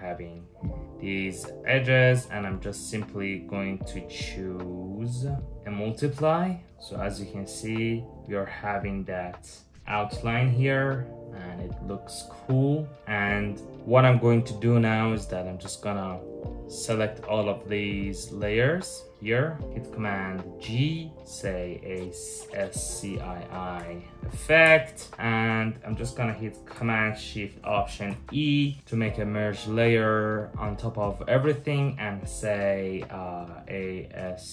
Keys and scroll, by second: 20.2 super+g, 21.2-24.2 typing, 24.3 Return, 27.7 alt+shift+super+e, 33.3-34.5 typing.